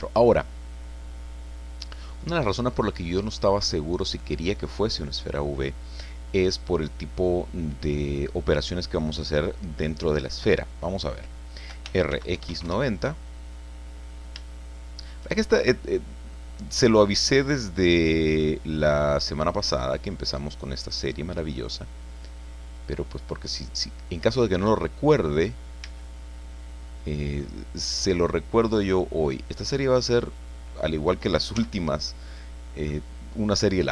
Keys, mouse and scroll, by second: 11.6-12.6 typing, 12.6 KP_Enter, 14.0-14.5 scroll up 3, 14.5-16.5 shift+middle drag, 18.3-25.1 drag, 25.2-25.6 scroll up 1, 25.7-27.0 drag, 25.8 z, 27.4-27.7 scroll down 2, 29.2-30.4 drag, 31.5 z, 32.1 middle click, 32.3 click.